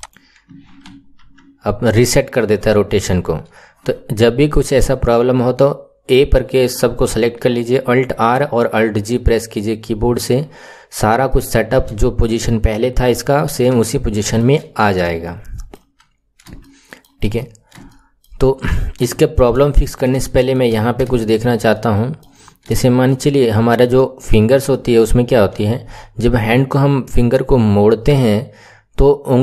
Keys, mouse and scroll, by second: 0.9 alt+r, 11.3-17.3 shift+middle drag, 17.3-17.9 scroll up 3, 17.9-18.8 shift+middle drag, 18.8 scroll down 1, 19.1-20.7 shift+middle drag, 20.7-21.1 scroll up 5, 21.1-22.3 shift+middle drag, 22.3 scroll up 5, 22.7-24.3 shift+middle drag, 24.3-24.6 scroll up 3, 24.6-27.9 shift+middle drag.